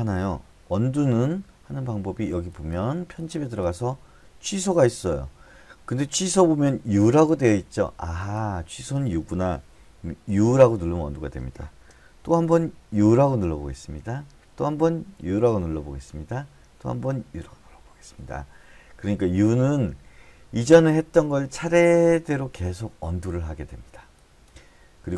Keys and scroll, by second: 10.7 u, 13.4 u, 15.5 u, 17.8 u.